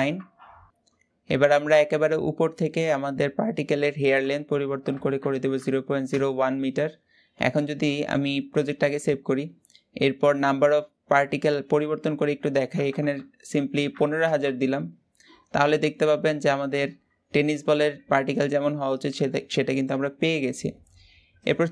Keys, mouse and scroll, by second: 0.7-5.9 middle drag, 5.9-7.3 drag, 7.3-8.7 middle drag, 8.7 scroll up 1, 14.5 KP_0, 15.1-15.6 scroll down 4, 15.6-18.1 middle drag, 18.1 scroll up 1, 18.2-19.8 middle drag, 19.8-21.3 scroll up 1, 21.3 scroll up 1.